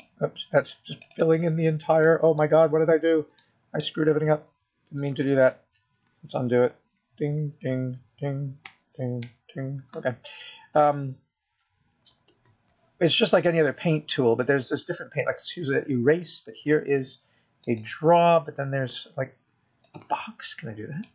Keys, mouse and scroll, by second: 0.7 click, 2.4 click, 3.1 click, 3.3 click, 4.7 click, 4.8 middle click, 4.8 scroll down 1, 5.7 scroll down 1, 5.8 middle click, 9.5 ctrl+z, 10.5 ctrl+z, 11.2 ctrl+z, 11.7 ctrl+z, 14.5 KP_0, 20.1 click.